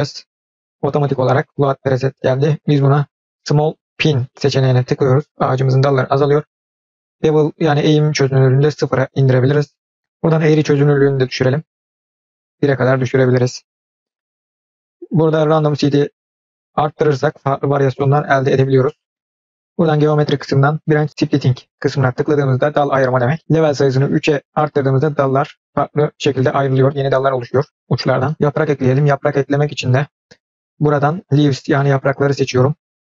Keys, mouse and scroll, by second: 0.4-2.4 drag, 8.3-9.9 drag, 11.1 click, 11.5 click, 16.9 click, 19.9 click, 24.3 click, 30.4-32.5 drag.